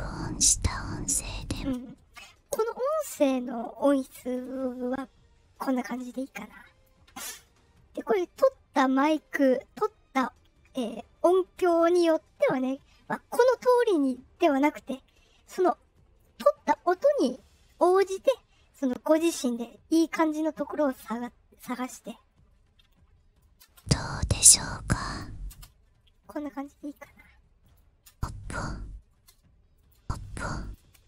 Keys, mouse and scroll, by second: 1.5 space, 5.9 click, 18.0-21.7 drag, 22.1-22.7 scroll down 2, 23.0 scroll up 1, 23.3 click, 23.6 space, 24.2 click, 25.4 space, 27.6 click, 28.0 space, 29.0 space, 29.7 click, 29.9 space, 30.5 click, 30.7 space.